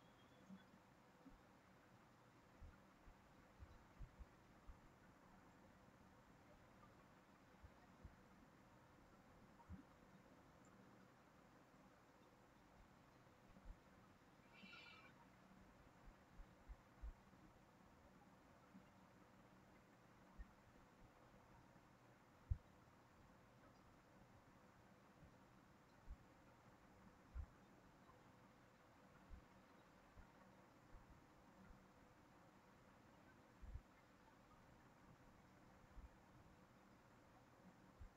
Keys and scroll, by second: 26.9 ctrl+c, 27.2 ctrl+v, 30.6 ctrl+z, 34.6 ctrl+z.